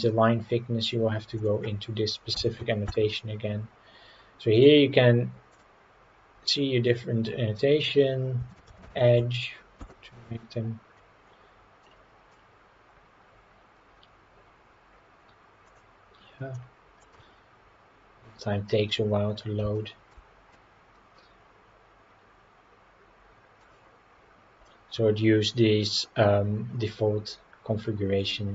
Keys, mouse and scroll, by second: 0.1 click, 1.5-3.5 drag, 5.1 click, 6.1 click, 7.0-16.2 drag, 16.6 middle click, 18.7 Tab, 19.2 scroll down 3, 19.7-20.1 shift+middle drag, 20.4 scroll down 1, 20.5-23.6 middle drag, 24.6-26.8 scroll down 4.